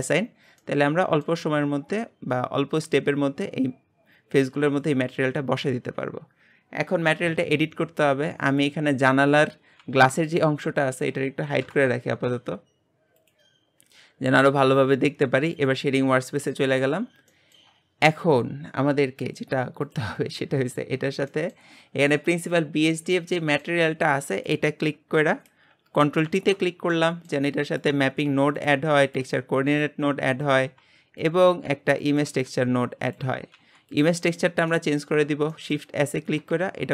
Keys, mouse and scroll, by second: 0.0 click, 0.6 middle click, 1.4 Tab, 2.1-3.8 scroll up 2, 5.0-8.6 scroll up 1, 8.6 click, 9.9 g, 13.2 click, 15.6 click, 16.5 middle click, 17.0-17.3 scroll up 1, 17.3-19.9 shift+middle drag, 19.9 click, 26.3 ctrl+t, 26.7 scroll down 2, 27.9 click, 28.5 g, 29.0-34.7 drag, 34.7-36.9 middle drag.